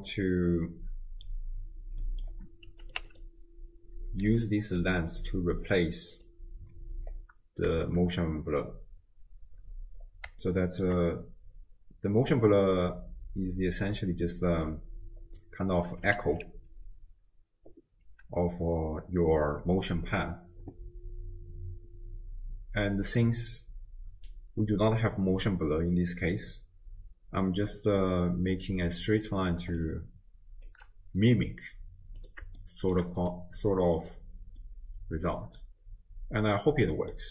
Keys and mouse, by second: 0.2-1.3 drag, 2.0 middle click, 2.8 click, 4.3 click, 5.2 click, 5.6 click, 7.8 shift+space, 9.5 space, 10.4-10.8 shift+drag, 13.8 d, 14.4-15.8 d, 14.7 click, 16.2 alt+q, 29.6 d, 29.8-30.9 drag, 30.7 d, 30.9 d, 32.2 click, 32.7-33.0 shift+drag, 33.3-34.0 drag, 34.1 click, 34.7-35.8 middle drag, 36.9 middle click.